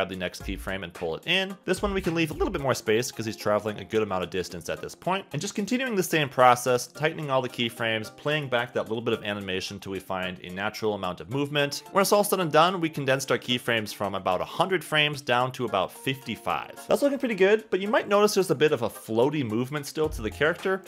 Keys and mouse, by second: 0.1 space, 0.5 space, 0.8 click, 2.0 click, 3.8 click, 4.2 space, 4.5 space, 5.9 space, 6.0 space, 6.0 click, 7.2 click, 7.7-9.2 typing, 8.0 click, 8.6 click, 8.7 click, 9.5 click, 10.0 click, 10.9 click, 11.4 click, 12.5 ctrl+z, 12.5 click, 13.1 space, 13.2 click, 13.7 space, 13.9 click, 14.5 click, 14.9 space, 15.4 ctrl+z, 16.0 ctrl+z, 16.1 click, 16.5 space, 16.6 space, 16.8 space, 19.3 space, 19.9 click.